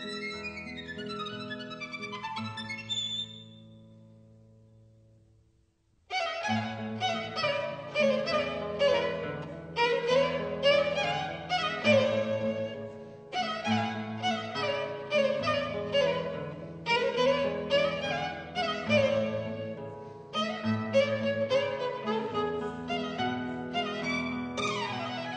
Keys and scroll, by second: 2.0 super+z, 4.2 super+z, 5.3 super+z, 6.3 super+z, 6.9 super+z, 12.9 super+z, 16.2 super+z, 19.6 super+z, 20.9-21.9 typing, 22.2 super+z.